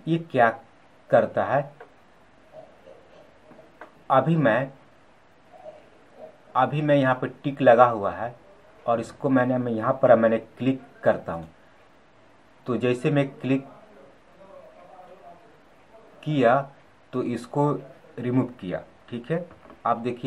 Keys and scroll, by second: 19.3 ctrl+z.